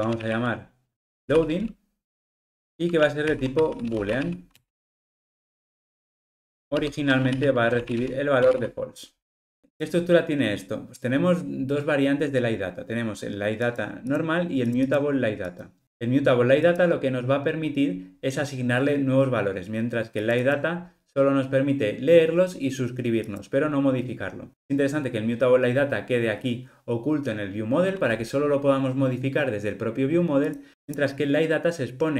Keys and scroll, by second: 4.6 Return, 6.2 alt+shift+Left.